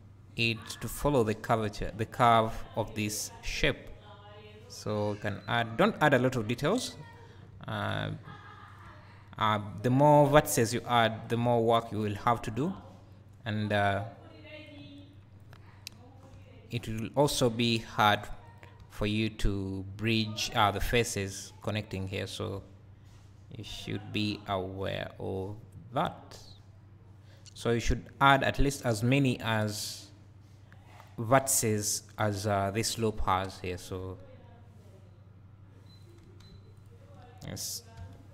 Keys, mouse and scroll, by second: 2.6 click, 14.9 click, 15.9-18.8 drag, 16.3 e, 20.5 click, 22.6 e, 23.9 click, 24.5 e, 36.1 click, 38.0 f.